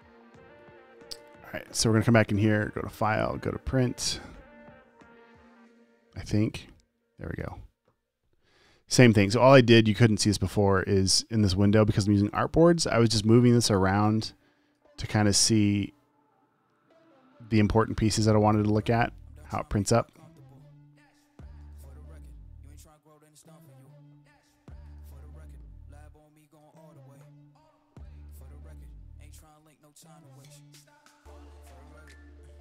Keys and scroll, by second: 28.7 super+p.